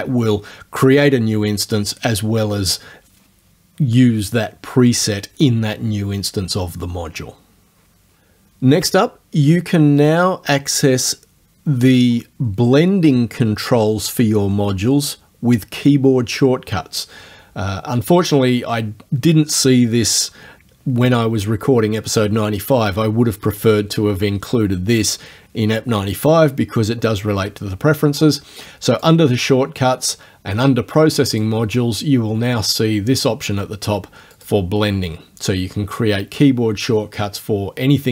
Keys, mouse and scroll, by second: 18.3 click, 29.0 click, 31.3 click, 34.4 click.